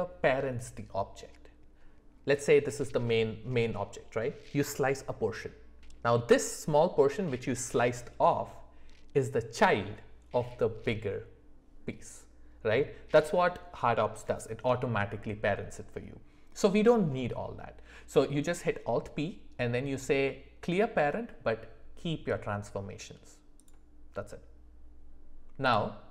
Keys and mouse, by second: 25.6 click.